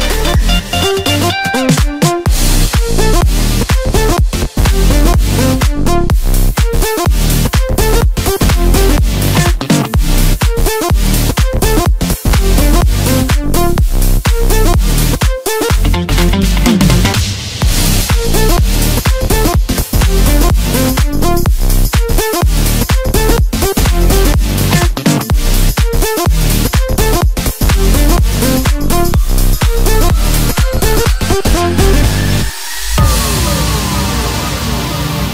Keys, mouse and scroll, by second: 0.4 click, 1.0-2.5 middle drag, 2.5 shift+click, 3.3 shift+click, 3.4 shift+click, 4.0 shift+click, 4.5-6.4 middle drag, 6.4 shift+click, 6.9 shift+click, 7.3-11.0 middle drag, 11.0 click, 11.6-13.4 middle drag, 13.4 shift+click, 14.5 shift+click, 15.1-16.8 middle drag, 16.8 shift+click, 17.0 shift+click, 17.4-19.8 middle drag, 19.8 shift+click, 20.5 shift+click, 21.0-22.3 middle drag, 22.3 scroll down 1, 22.5-23.9 middle drag, 23.9-24.6 scroll up 1, 24.6 ctrl+i, 26.1 x, 27.3 middle click, 28.1 1, 28.8 KP_1, 29.9 click, 31.0 shift+click, 31.9 f, 33.1-34.7 right drag, 34.7 click.